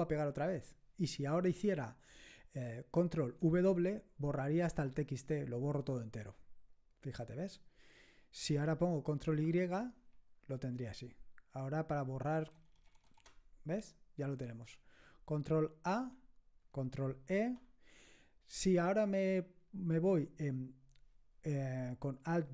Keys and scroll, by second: 4.6 ctrl+w, 9.4 ctrl+y, 12.3 BackSpace, 12.6 BackSpace, 12.8 BackSpace, 13.2 BackSpace, 15.9 ctrl+a, 17.3 ctrl+e.